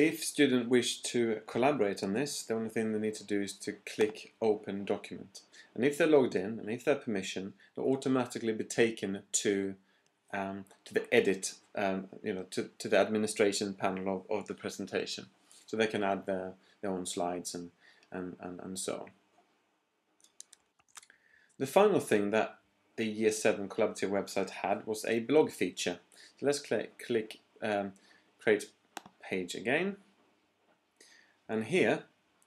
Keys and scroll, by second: 20.6 shift+super+p.